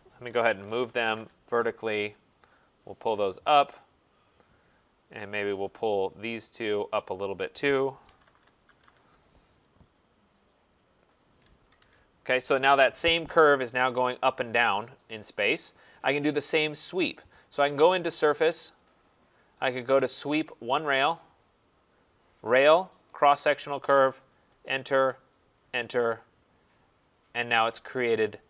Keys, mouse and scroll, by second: 0.2-1.5 typing, 2.3 click, 3.2-4.0 typing, 3.5 click, 3.9 scroll, 5.2 click, 6.8 shift+click, 7.8-9.2 typing, 10.1 click, 11.2 click, 11.6 Escape, 11.8 Escape, 12.4-13.2 typing, 15.5 right click, 15.9-16.2 scroll, 18.9 click, 20.5 middle click, 20.8 click, 22.4 click, 23.3 click, 24.5 Return, 25.5 Return, 27.1 click, 27.7 scroll.